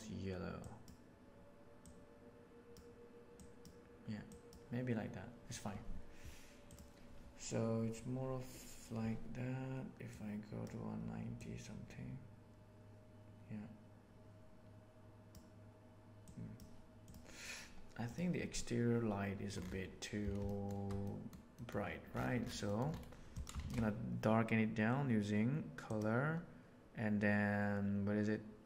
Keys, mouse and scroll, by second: 10.0-10.6 drag, 11.3-15.3 drag, 16.1 right click, 20.3-20.6 shift+middle drag, 21.0 middle click, 21.5 middle click, 22.7 middle click, 23.5 shift+a.